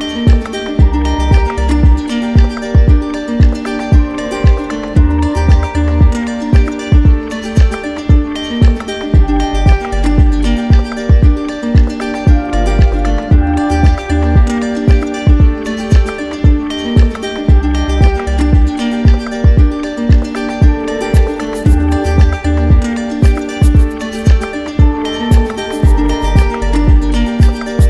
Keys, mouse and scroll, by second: 0.2 shift+click, 0.6 shift+click, 0.9 shift+click, 3.0 shift+click, 3.5 shift+click, 4.0 shift+click, 4.3 shift+click, 5.1 shift+click, 6.6 shift+click, 7.0 right click, 8.0 right click, 8.6 z, 9.4 click, 10.2 alt+right click, 11.8 click, 12.2 ctrl+z, 13.5-14.6 drag, 15.1-16.8 drag, 17.5 right click, 19.1 click, 19.6 ctrl+z, 20.6 click, 21.2 ctrl+z, 22.1 click, 23.0 click, 23.9 right click, 24.5 right click, 26.1 shift+click, 26.5 shift+click, 26.7 shift+click, 26.9 shift+click, 27.3 shift+click, 27.4 shift+click, 27.7 shift+click.